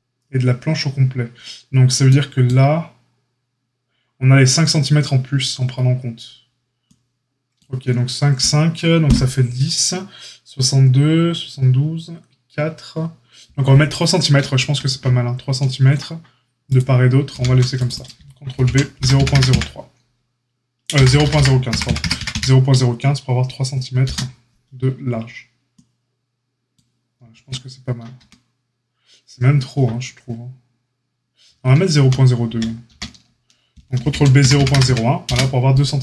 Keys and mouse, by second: 17.2 ctrl+r, 18.5 ctrl+b, 27.3 Tab, 28.1 Tab, 31.9 ctrl+z, 32.4 ctrl+z, 32.8 ctrl+z, 33.9 ctrl+b.